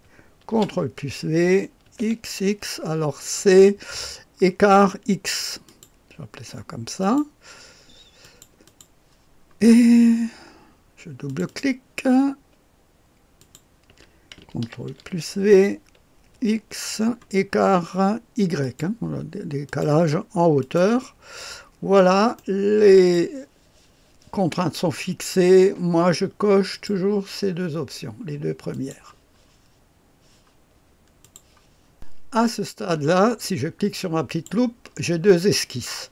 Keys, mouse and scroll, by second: 0.5 ctrl+v, 2.0 x, 4.2-5.2 scroll down 1, 5.6 click, 7.0 click, 8.2 click, 11.2 click, 13.3 click, 14.8 ctrl+v, 16.3 x, 17.3-18.0 scroll down 1, 18.0 typing, 18.6 click, 18.8 right click, 19.6 click, 19.8 right click, 20.8 click, 21.6-22.3 scroll down 1, 22.3 click, 26.7 click, 28.7 click, 31.2 click, 34.2 click, 35.8-36.1 drag.